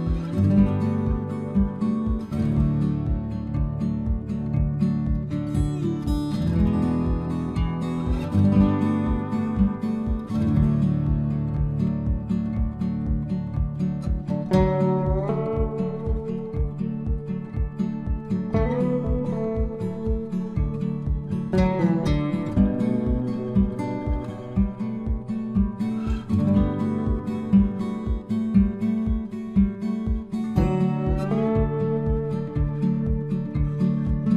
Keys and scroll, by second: 1.4 Return, 23.2 ctrl+c, 24.0 ctrl+f.